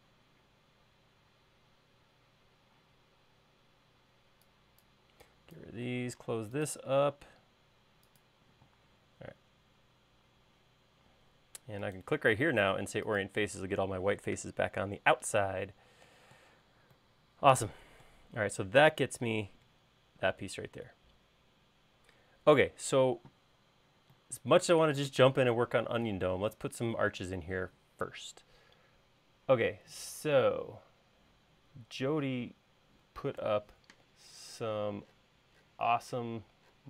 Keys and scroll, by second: 3.0 e, 6.0 l, 8.7 space.